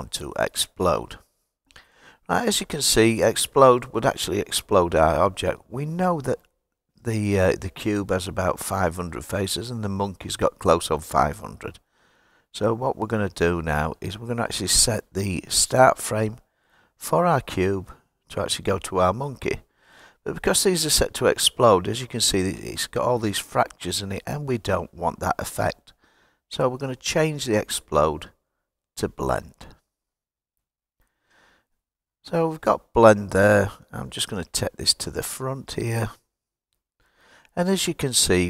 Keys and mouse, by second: 27.6-30.5 drag, 34.5-36.2 drag, 37.6 click.